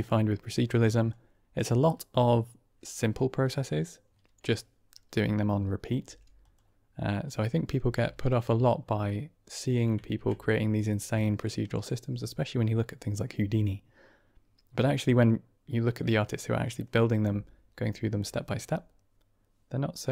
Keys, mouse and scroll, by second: 0.2 middle click, 1.0-1.5 drag, 5.9 g, 7.7 g, 10.0 shift+a.